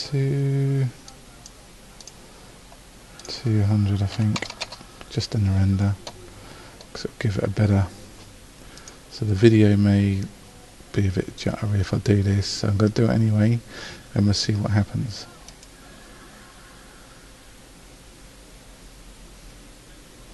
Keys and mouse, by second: 4.6 KP_0.